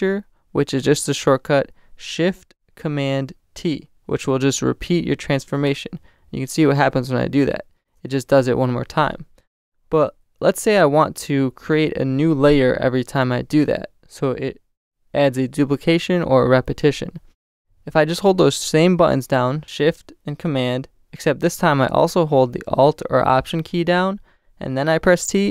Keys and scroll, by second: 6.2 shift+super+t, 9.8 alt+super+z, 24.4 alt+shift+super+t.